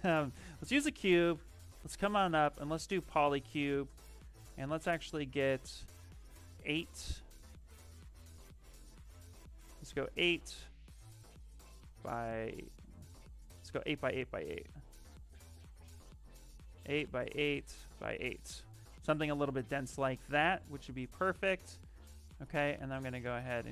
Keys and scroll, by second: 0.6 w, 18.6 q, 19.0 q.